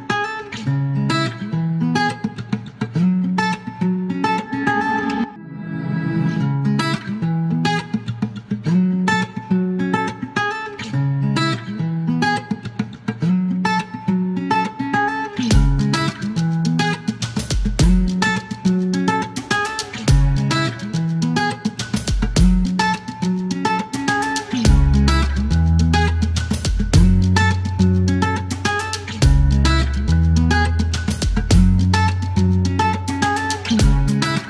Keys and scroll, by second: 0.0 Return, 1.9-2.6 typing, 2.9 alt+q, 6.0-7.0 typing, 8.6 typing, 10.5 e, 11.9 space, 15.9 F1, 21.5 e, 27.4-28.7 typing, 29.7-31.2 typing, 32.8 c, 33.2 shift+g, 33.5 Delete.